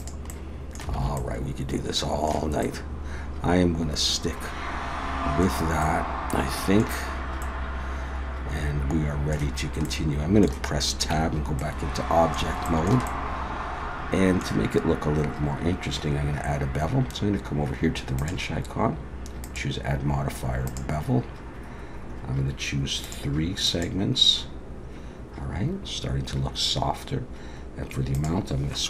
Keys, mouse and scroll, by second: 0.3 middle click, 1.0 alt+a, 1.2 middle click, 2.6 middle click, 5.8 middle click, 7.4 middle click, 9.9 middle click, 11.1 Tab, 11.6 middle click, 12.7 shift+middle click, 13.1 middle click, 18.2 click, 19.4 click, 23.0 click, 23.7 click, 28.1 click.